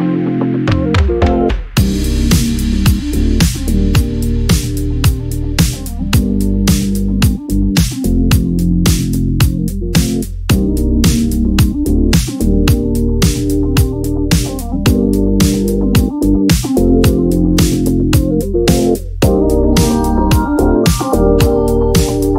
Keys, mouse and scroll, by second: 1.5-3.2 drag, 4.0 click, 6.6 click, 8.0 Delete, 9.1 click, 11.0 click, 12.4 click, 14.7 Delete, 16.6 click, 18.7 click, 19.4 ctrl+d, 20.2-21.5 ctrl+drag, 21.6 ctrl+click, 22.1 ctrl+d.